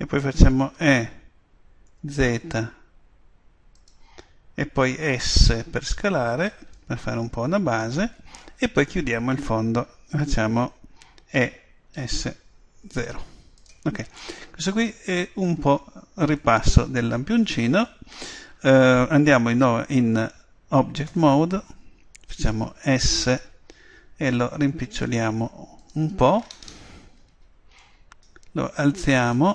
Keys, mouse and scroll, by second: 3.9 click, 6.4 click, 13.7 click, 17.3 middle click, 21.1 Tab, 22.8 s, 25.9 click, 27.2-29.3 middle drag, 29.3 right click, 29.4-29.5 middle drag.